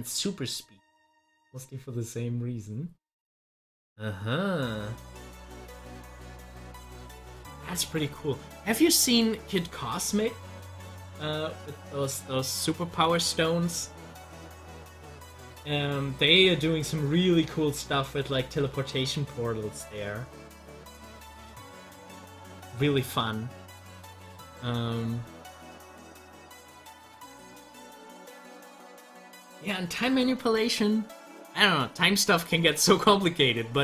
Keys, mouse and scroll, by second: 13.1 click, 23.2 scroll up 1, 26.9 scroll up 1, 32.7 scroll down 1.